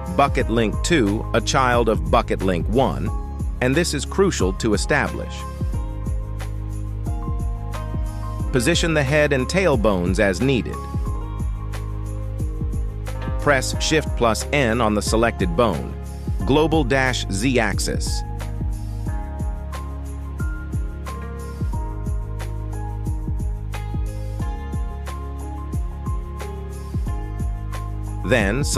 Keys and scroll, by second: 1.6 g, 4.5 g, 6.7 shift+s, 7.7 g, 8.5 Tab, 9.7 shift+s, 10.4 Tab, 11.7 shift+s, 14.7 shift+n, 18.0 g, 18.6 Escape, 19.3 g, 19.9 Escape, 22.6 [, 28.4 g.